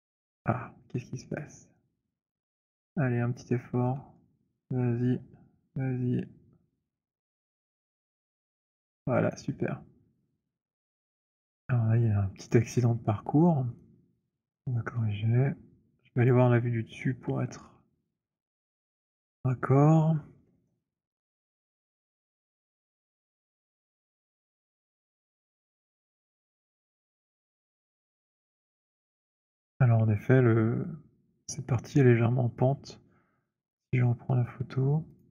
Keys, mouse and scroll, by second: 0.0-2.7 typing, 0.3 middle click, 2.7 middle click, 4.0-8.7 typing, 5.4 middle click, 8.7 middle click, 9.4 alt+right click, 11.0 alt+right click, 11.5 alt+click, 12.6 click, 16.3 click, 17.5 click, 18.7 click, 19.5-20.5 scroll, 22.3-22.9 scroll, 23.8 alt+middle click, 24.0 alt+middle click, 25.1 alt+middle click, 25.4 alt+middle click, 25.7 alt+middle click, 26.7 alt+middle click, 27.2 alt+middle click, 33.7 click, 35.2 click.